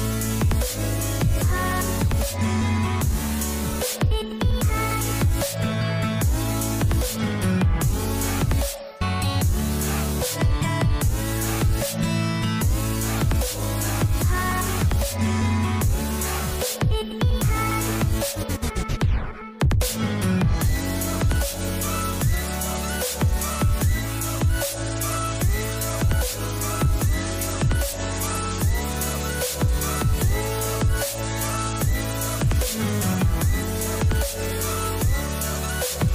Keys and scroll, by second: 13.5 Up, 14.3 Down, 14.6 Up, 24.9 ctrl+c.